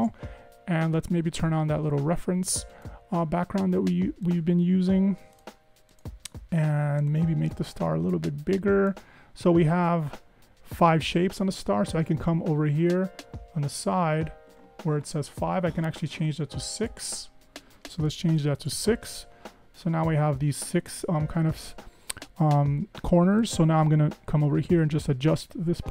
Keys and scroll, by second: 18.4 6, 18.6 Tab.